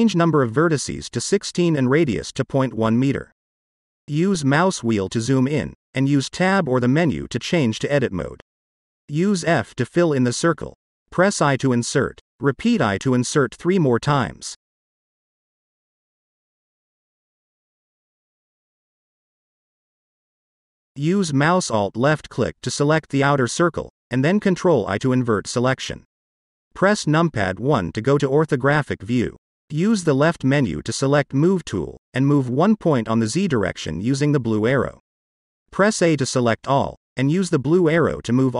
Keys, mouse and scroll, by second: 2.3-5.2 drag, 5.7-8.4 scroll up 8, 8.4-9.3 drag, 10.4 f, 11.1 middle click, 12.0-13.2 scroll up 1, 13.2 i, 14.3 click, 14.8 i, 16.3 click, 16.6 i, 18.4 click, 18.7 i, 19.9 click, 20.9 click, 21.6 alt+click, 22.5 alt+click, 23.2 alt+click, 24.5 middle click, 26.5 ctrl+i, 27.6 KP_1, 29.7 click, 31.4-35.4 drag, 36.4 a, 38.0-38.5 drag.